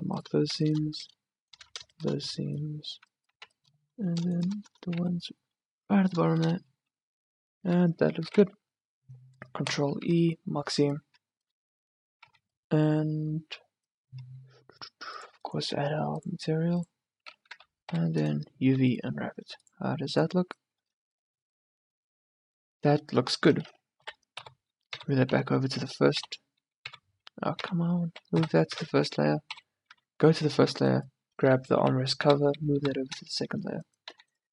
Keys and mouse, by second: 2.9 middle click, 3.5 z, 5.1 z, 8.4 ctrl+e, 10.1 Tab, 11.1 Tab, 12.4 a, 17.7 a, 18.1 u, 18.8 Tab, 23.4-25.1 drag, 24.1 m, 25.1 1, 26.3 m, 27.7 2, 28.5 m, 29.6 2, 30.0 1, 30.9 click, 31.8 m, 32.8 2, 34.1 a.